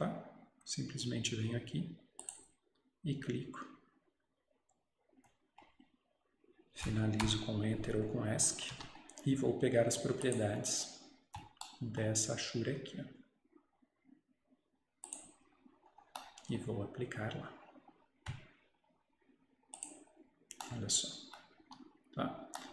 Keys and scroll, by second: 7.3 Return, 8.6 Escape, 8.8 Escape, 21.7 Escape.